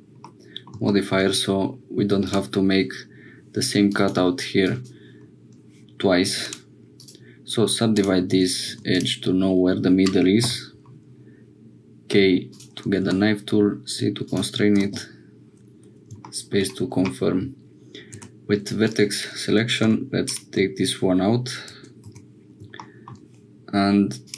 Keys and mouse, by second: 0.2 middle click, 4.0 click, 4.7 click, 6.3 2, 8.7 1, 8.9 click, 10.4 k, 18.9 click, 19.8 x, 22.1 Tab, 24.2 click.